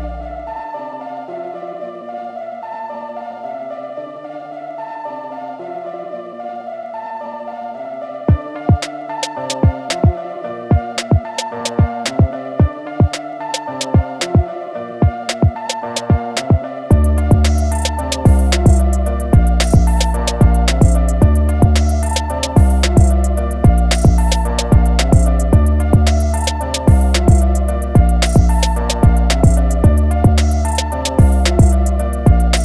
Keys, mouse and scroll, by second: 0.7 ctrl+a, 1.5 shift+m, 2.5 click, 4.0 alt+scroll up 1, 4.7 alt+scroll up 1, 7.8 click, 8.2 scroll down 1, 9.0 alt+scroll up 1, 11.0 alt+click, 11.7-12.4 alt+scroll down 2, 13.4-15.3 scroll down 1, 15.3 click, 17.4-17.7 scroll up 3, 18.2 click, 20.0 scroll down 1, 24.3-24.7 scroll down 1, 25.2-25.6 scroll up 1, 26.2 scroll down 1, 26.8 scroll up 1, 28.0 scroll down 1, 29.0 click, 30.3 scroll up 1.